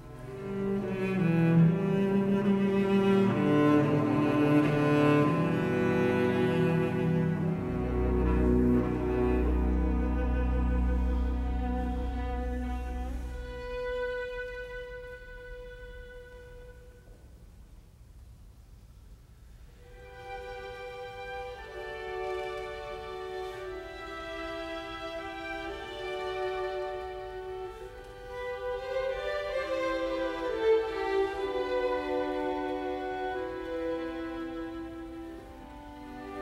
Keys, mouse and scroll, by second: 3.0 Escape, 10.7 Escape, 14.0 f, 14.1 space, 15.1 KP_Decimal, 15.4 Return, 15.9 space, 17.5 f, 17.7 space, 18.3 Escape, 20.2 space, 21.5 space, 22.0 Escape, 32.7 Escape, 36.3 space.